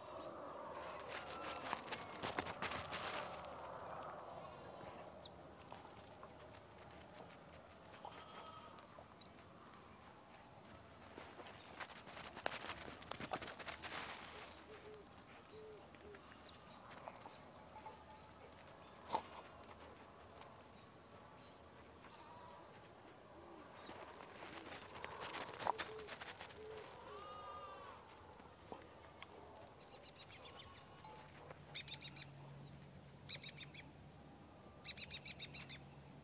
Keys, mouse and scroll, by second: 0.3-6.8 drag, 8.1 alt+scroll up 1, 8.6-11.0 drag, 11.3 alt+scroll down 1, 12.1-13.6 scroll up 1, 14.0 click, 15.8-16.3 scroll up 1, 16.5-23.3 drag, 23.4 ctrl+z, 24.8-25.8 drag, 27.3 alt+scroll down 1, 28.2 ctrl+scroll down 1, 29.3 right click, 29.7 click, 29.9 alt+scroll up 1, 30.2 alt+scroll down 1, 30.6 alt+scroll up 1, 31.0-32.3 drag, 32.8-33.1 scroll up 2, 33.8-36.2 drag.